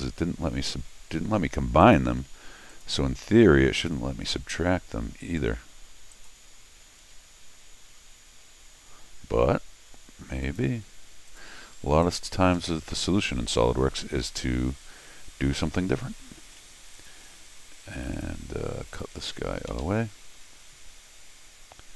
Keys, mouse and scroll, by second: 1.8 click, 2.7 click, 3.8 click, 6.1 click, 10.4 click, 11.3 click, 12.0 click, 14.6 middle click, 15.1 middle click, 16.5 middle click, 16.9 click, 18.1 click, 18.9 click, 19.7 alt+x, 21.0 scroll down 2.